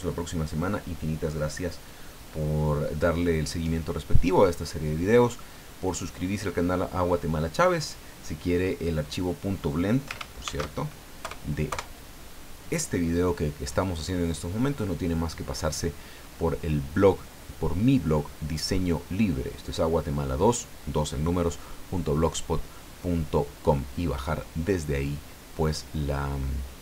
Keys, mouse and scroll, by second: 10.4 ctrl+shift+s, 11.2 KP_Add, 11.7 KP_Enter.